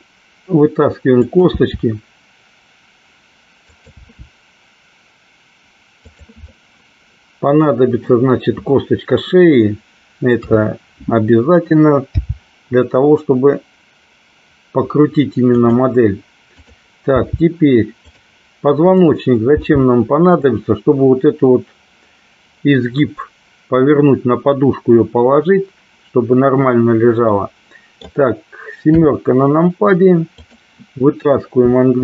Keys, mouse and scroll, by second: 1.2 click, 1.7 e, 3.9 click, 4.1 e, 6.1 click, 6.6-8.2 middle drag, 10.5 KP_3, 12.2 g, 16.7 click, 17.3 g, 18.1 click, 19.1 click, 19.7 g, 20.4 click, 27.5 middle click, 29.0 KP_7, 30.5 click.